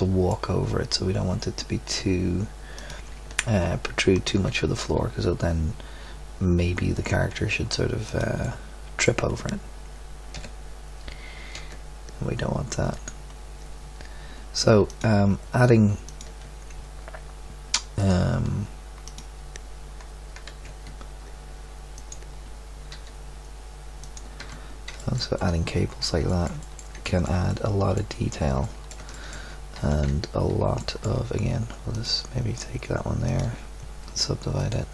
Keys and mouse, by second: 0.1-6.1 drag, 6.9 click, 8.4 middle click, 10.3 g, 14.8-19.0 drag, 19.9-21.9 drag, 20.3 g, 22.9 r, 24.4 Tab, 29.7 Tab.